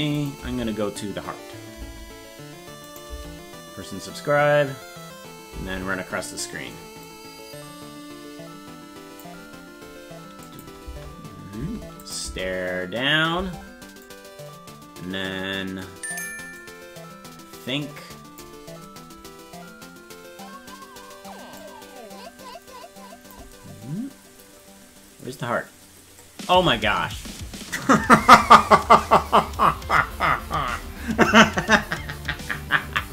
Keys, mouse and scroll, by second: 0.2 click, 0.2 space, 2.9 click, 2.9 space, 6.3 space, 7.1-9.2 drag, 10.5 click, 10.9 space, 12.1 click, 12.1 space, 12.3 space, 14.1-16.2 drag, 16.6-18.4 drag, 21.6-23.4 drag.